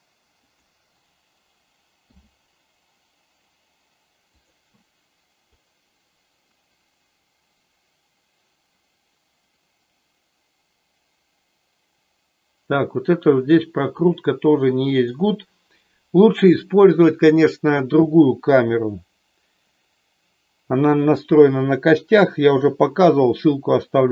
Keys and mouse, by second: 2.0 i, 5.6-15.1 drag.